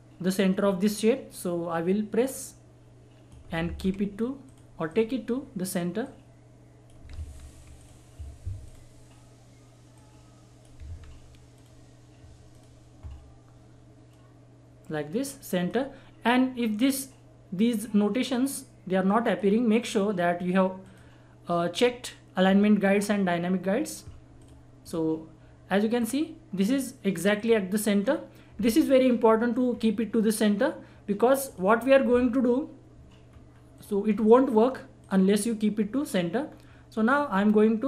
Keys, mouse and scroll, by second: 2.2 click, 2.2 click, 3.6 ctrl+z, 4.5 click, 4.5 click, 7.1 ctrl+z, 7.7 click, 10.8 ctrl+z, 11.5-19.2 drag, 24.3 click, 28.0-28.3 scroll down 1, 29.7 scroll up 1, 31.4 click, 31.9 scroll down 1, 33.2-33.7 scroll up 1, 33.8 click, 34.0 scroll down 1, 34.5 scroll up 1, 35.0 click, 36.4 scroll down 1, 37.0-37.8 drag.